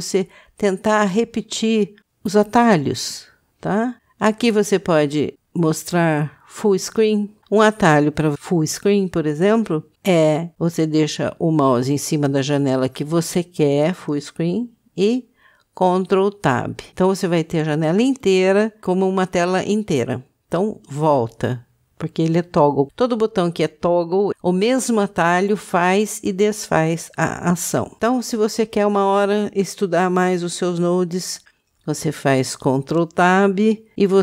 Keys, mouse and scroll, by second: 7.4 click, 16.0 ctrl+space, 20.9 ctrl+space.